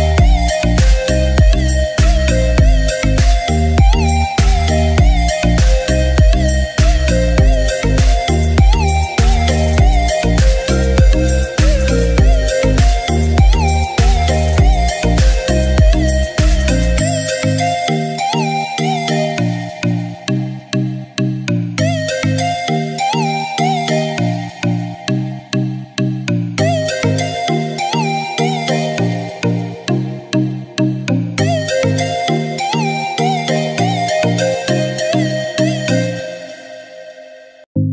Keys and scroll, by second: 16.1 ctrl+=.